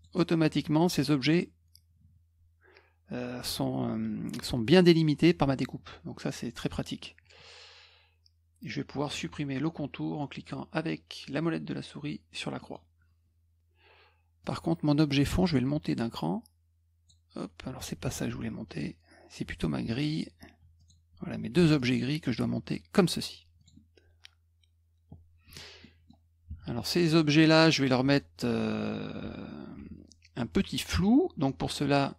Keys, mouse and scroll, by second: 1.2 click, 12.6 middle click, 14.4 click, 15.2-17.0 drag, 18.0 ctrl+z, 19.9 click, 20.7 shift+click, 21.7-22.9 drag, 23.5 click, 25.8 middle click, 26.4 F2, 27.0 click, 27.6 middle drag, 28.0 F1, 29.2 F2, 29.7 F1.